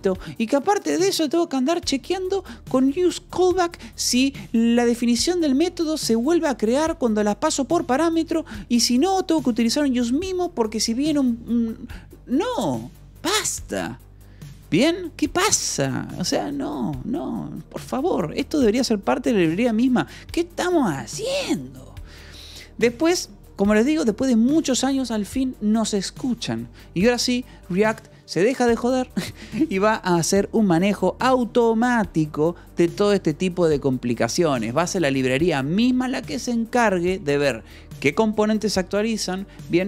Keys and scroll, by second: 17.5 k, 18.5 Escape, 19.6 k, 20.9-23.3 typing.